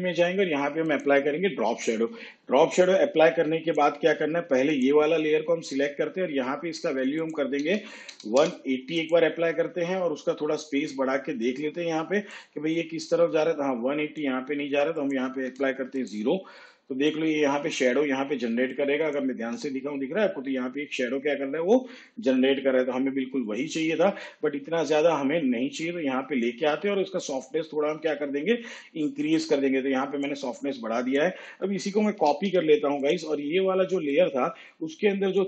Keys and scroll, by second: 7.7 1, 8.2 8, 8.4 0, 15.5 0, 18.6 space, 32.0 ctrl+c.